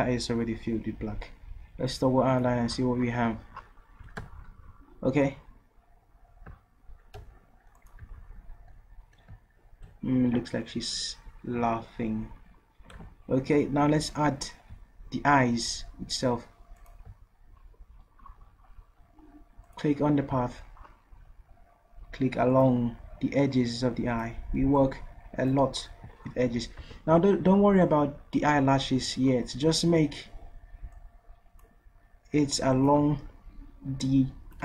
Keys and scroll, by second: 4.0 ctrl+v, 5.3 ctrl+z, 7.2 v, 26.8 ctrl+z.